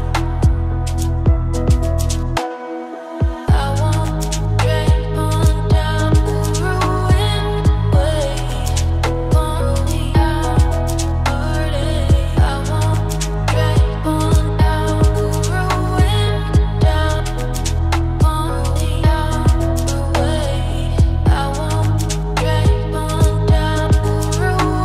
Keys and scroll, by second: 11.2 ctrl+space, 23.8 ctrl+space.